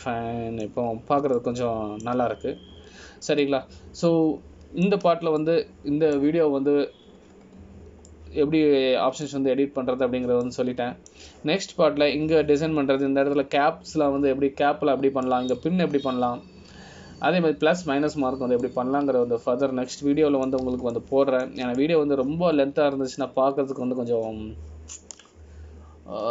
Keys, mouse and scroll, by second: 1.3 click, 1.9 middle click, 3.0 scroll up 3, 3.5 shift+middle click, 4.7-5.6 scroll down 2, 5.6 middle click, 7.6 middle click, 9.2-10.3 scroll down 5, 10.3 middle click, 12.6 middle click, 17.5 middle click, 20.8 middle click, 23.1 shift+middle click.